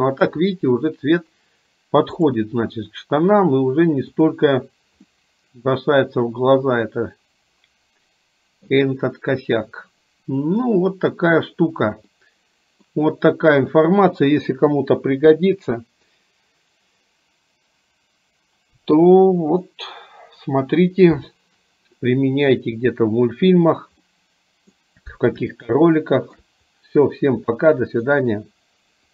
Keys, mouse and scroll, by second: 2.2 click, 4.3 click, 5.4-8.9 middle drag, 12.4 middle click, 24.3 middle click, 24.3 scroll up 1, 25.7-26.7 shift+middle drag, 27.7 middle click.